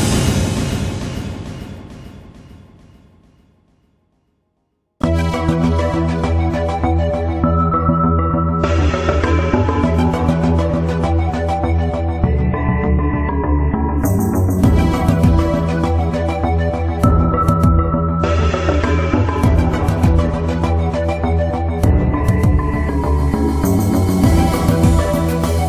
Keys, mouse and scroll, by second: 0.4-3.9 drag, 3.9 middle click, 4.4 shift+middle click, 5.6 Tab, 6.0 middle click, 9.3-18.3 drag, 22.2 Tab, 22.5-23.7 middle drag, 24.5-25.6 drag.